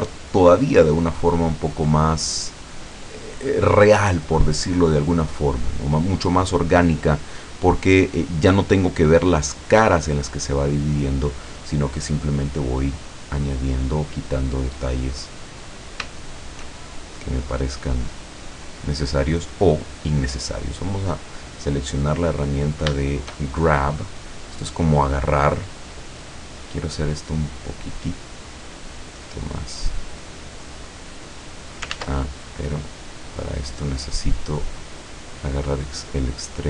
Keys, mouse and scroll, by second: 0.0-1.1 drag, 1.2 click, 2.3-4.0 drag, 4.2-5.7 drag, 5.8-6.8 drag, 7.1 click, 7.8-9.1 drag, 9.3-10.8 drag, 11.6-11.9 scroll down 1, 12.4-13.6 drag, 13.8-14.1 scroll up 1, 14.5 middle click, 15.6-16.9 middle drag, 17.0-18.2 shift+drag, 18.6-18.9 scroll up 1, 19.4-19.7 scroll up 1, 19.8 click, 21.1 click, 23.1-24.1 shift+middle drag, 24.1 right click, 25.0 scroll down 1, 26.1 scroll down 1, 27.4-31.9 drag, 32.0 ctrl+z, 32.5-33.6 ctrl+middle drag, 33.9-34.3 scroll up 1, 34.4 middle click, 35.0 scroll up 1, 35.2-35.9 scroll down 1, 35.9-36.6 drag.